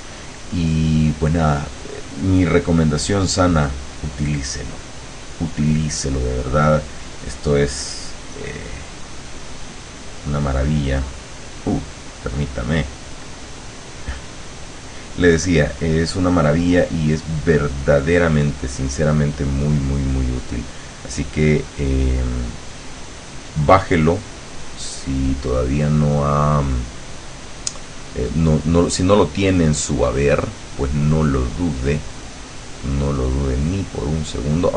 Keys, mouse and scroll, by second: 0.8 click, 1.8 click, 3.6 click, 8.4 click, 9.4-10.7 drag, 21.3-23.0 drag, 23.5-25.3 drag, 30.6-34.7 drag.